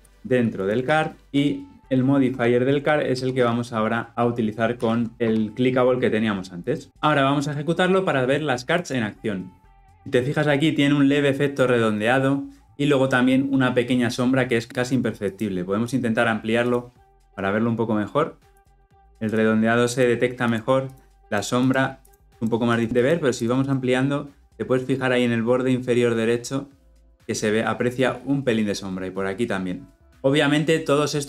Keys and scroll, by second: 0.0 ctrl+x, 0.8 ctrl+v, 1.2 ctrl+alt+o, 4.6 ctrl+shift+v, 8.7 shift+F10.